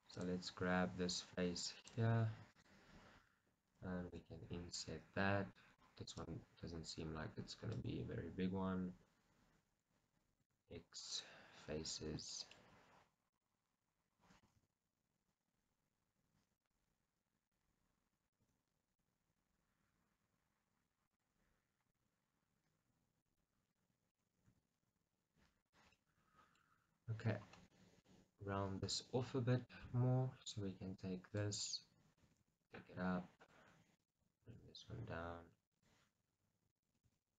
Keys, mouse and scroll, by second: 0.3 click, 1.8-3.4 drag, 6.4 click, 7.8-10.5 drag, 10.5 x, 11.8 scroll up 1, 12.4-13.4 shift+middle drag, 13.4 click, 14.5 g, 16.7 right click, 17.6-21.2 middle drag, 18.5 g, 21.2 click, 22.0-24.5 middle drag, 24.5 g, 25.8 click, 26.1-30.5 middle drag, 26.8 scroll, 30.5-31.8 drag, 31.8 middle click, 32.3 g, 33.4 middle click, 33.5 click, 34.5 g, 36.0 click, 36.9 g.